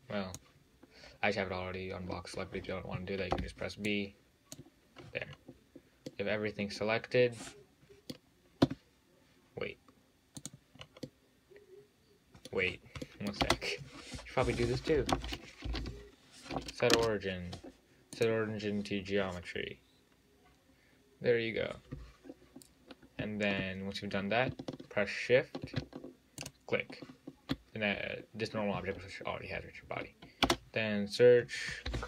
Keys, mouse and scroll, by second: 3.6 b, 5.3 scroll down 2, 5.5-6.3 scroll up 4, 6.3-8.9 middle drag, 8.9 `, 10.6 drag, 11.0 scroll up 3, 11.3-12.8 middle drag, 12.8-13.3 scroll down 6, 13.3 middle click, 13.6 space, 26.7 shift+click, 30.7 space.